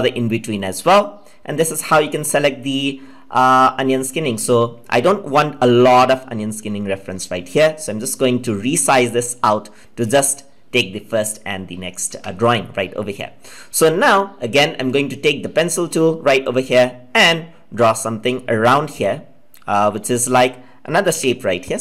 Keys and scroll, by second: 21.0 ctrl+z.